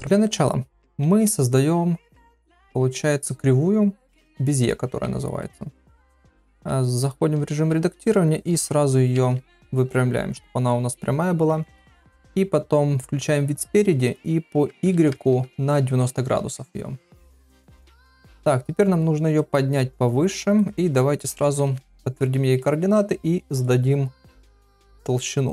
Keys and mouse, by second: 1.1 shift+a, 5.4 middle click, 6.2 Tab, 7.6 s, 9.1 Tab, 11.5 KP_3, 11.9 KP_1, 14.0-15.9 drag, 18.2 click, 19.3-20.6 drag, 21.7 ctrl+a, 23.5 click, 24.3 click, 25.4-25.5 drag.